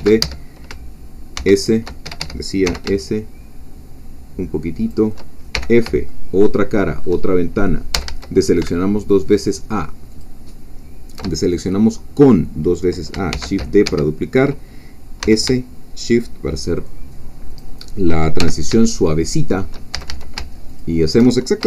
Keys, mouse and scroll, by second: 0.0 shift+d, 0.2 shift+Escape, 1.4 shift+s, 2.0 Escape, 2.6 shift+s, 4.8 shift+click, 5.6 shift+f, 6.1-7.2 shift+middle drag, 8.0 a, 10.2 alt+shift+click, 13.3 shift+d, 13.9 Escape, 15.2 s, 17.5 shift+click, 18.4 shift+f, 18.9-19.9 shift+drag, 19.9 shift+a, 20.7 alt+shift+click.